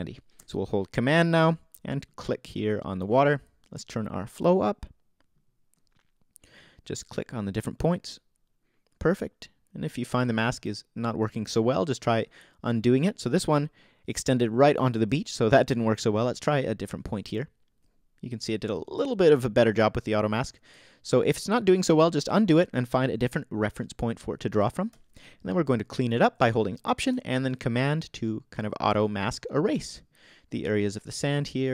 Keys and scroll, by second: 15.1 super+z.